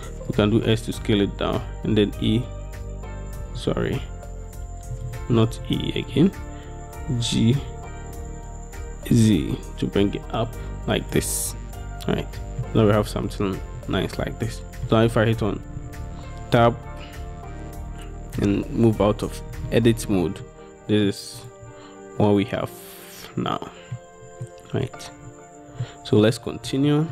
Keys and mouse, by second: 0.4 click, 2.2 e, 3.8 ctrl+z, 5.6 ctrl+z, 7.2 g, 9.2 z, 11.0 click, 12.7-14.9 drag, 16.4 Tab, 17.0-18.5 drag, 19.8-20.2 shift+drag, 20.5-21.2 drag, 21.5 middle click, 22.3-24.0 middle drag, 24.5-24.9 middle drag, 25.9-26.3 middle drag, 27.0 shift+middle drag.